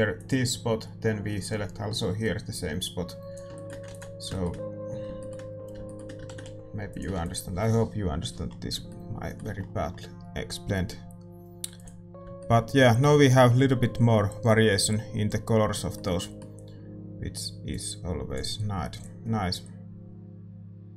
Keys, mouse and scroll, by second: 7.1 shift+z, 7.2 ctrl+s, 7.2-20.9 drag, 7.2-8.9 middle drag.